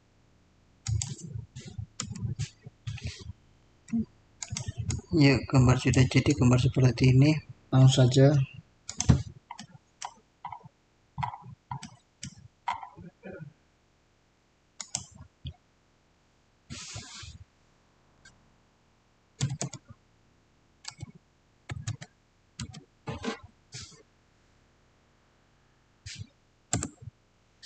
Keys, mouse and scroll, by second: 2.1 click, 4.3 click, 4.3-7.6 drag, 8.7 click, 8.8 click, 9.5 middle click, 10.3 scroll up 1, 11.7 middle click, 12.5 scroll up 1, 14.7 click, 19.1-20.0 typing, 19.3 click, 20.7 Tab, 21.3-22.5 typing, 26.6 Return.